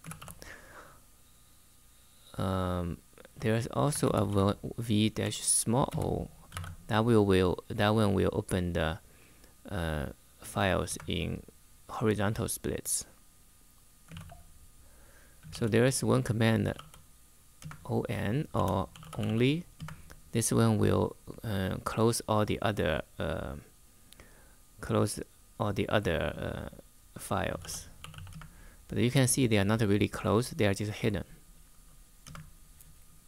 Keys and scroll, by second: 3.6-6.3 typing, 10.6 Return, 13.5-17.0 typing, 17.3 Return, 18.0-19.5 typing, 19.5 Return, 27.1-28.3 typing, 32.0 Return.